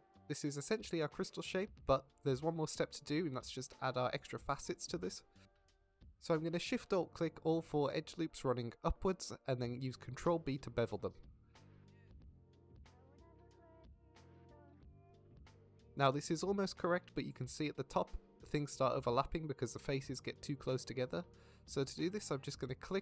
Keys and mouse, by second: 0.5 middle click, 2.4 middle click, 4.1 middle click, 4.9-7.3 middle drag, 8.6-10.2 middle drag, 11.1 click, 11.7 alt+shift+click, 12.1 middle click, 12.7 alt+shift+middle click, 14.7 shift+middle click, 15.1 ctrl+b.